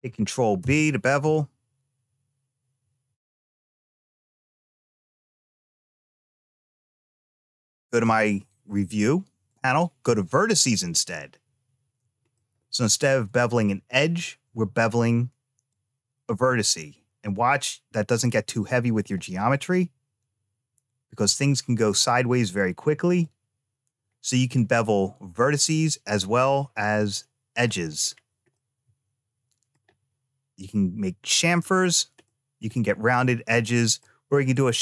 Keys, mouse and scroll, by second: 0.5 ctrl+b, 9.3 click, 11.0 scroll up 2, 12.2 shift+middle click, 13.3 middle click, 15.5-18.9 drag, 19.4-23.1 drag, 26.8 click, 27.5 click, 27.8-28.4 scroll down 2, 28.4-29.6 middle drag, 28.4 scroll down 1, 32.1 middle click, 32.5-33.4 scroll up 1, 33.4 middle click.